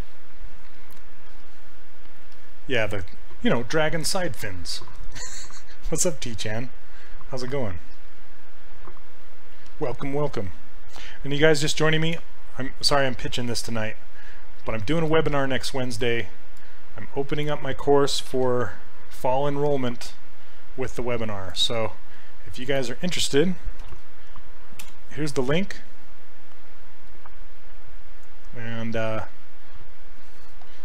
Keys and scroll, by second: 18.3 ctrl+c, 23.9 ctrl+v, 24.8 Return.